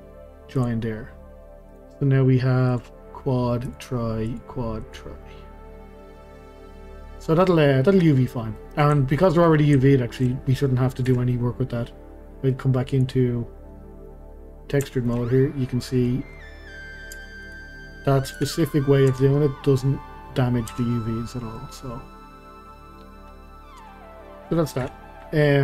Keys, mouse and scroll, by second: 0.6 click, 1.7 click, 2.3-2.7 scroll up 1, 2.7 click, 3.6 click, 4.3 click, 4.8 click, 5.2-7.7 middle drag, 7.7 scroll down 2, 7.9-9.3 middle drag, 9.3-9.8 scroll up 2, 9.8-11.1 shift+middle drag, 11.1 KP_Divide, 12.9 click, 13.7-14.1 scroll down 2, 14.1-15.6 middle drag, 15.6-15.9 scroll up 2, 15.9-17.1 middle drag, 17.1 Tab, 17.4 click, 18.4 KP_Divide, 19.1 Tab, 19.4-20.0 middle drag, 20.0-20.7 scroll up 2, 20.7 Tab, 21.5-23.3 middle drag, 23.3-23.8 scroll down 2, 23.8 Tab, 24.9 KP_Divide, 25.4-25.6 scroll down 2.